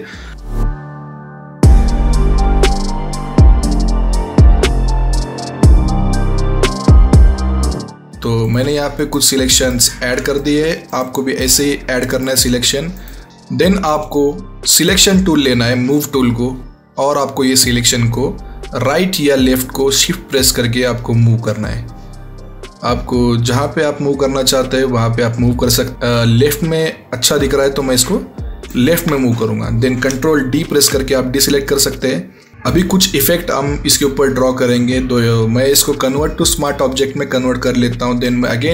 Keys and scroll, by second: 30.6 ctrl+f.